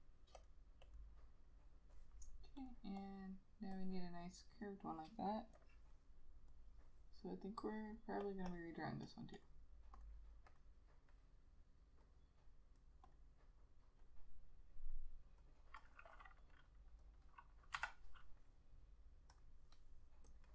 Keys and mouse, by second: 3.1 double click, 8.6 double click, 15.7 double click.